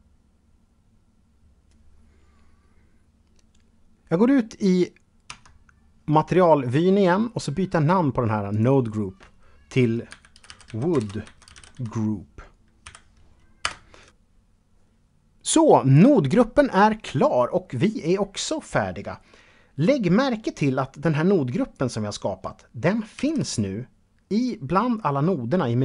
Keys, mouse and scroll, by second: 4.5 Tab, 5.4-7.1 scroll up 1, 7.3 scroll up 1, 7.7 click, 9.3-10.6 typing, 11.8-12.5 typing, 12.8 Return, 20.2 click, 22.3 shift+a.